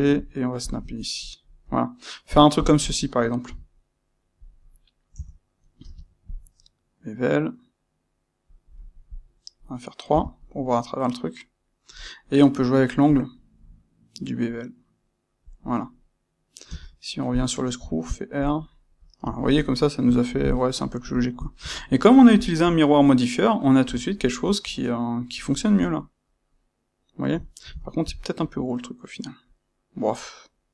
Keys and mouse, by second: 0.6 ctrl+click, 0.9-2.5 middle drag, 2.5 click, 3.4 c, 4.4 click, 5.1 Tab, 5.7 space, 8.8-18.5 middle drag, 18.5-18.9 drag, 18.9-30.7 middle drag.